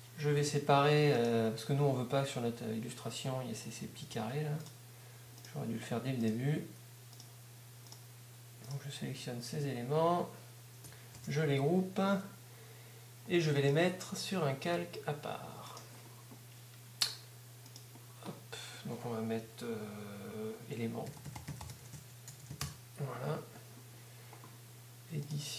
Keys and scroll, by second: 12.2 g, 20.8-22.4 typing, 22.6 Return, 24.2 s.